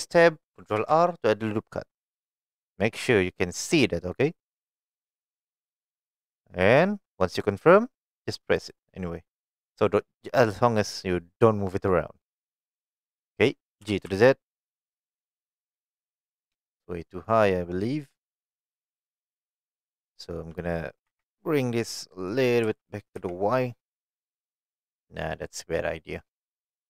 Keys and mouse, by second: 0.8 ctrl+r, 8.6 right click, 12.4 middle click, 13.8 g, 14.1 z, 16.4 click, 16.6-18.5 middle drag, 21.1 2, 22.0 middle click, 22.6 g, 23.2 y, 24.9 right click, 25.5 middle click, 26.6 middle click.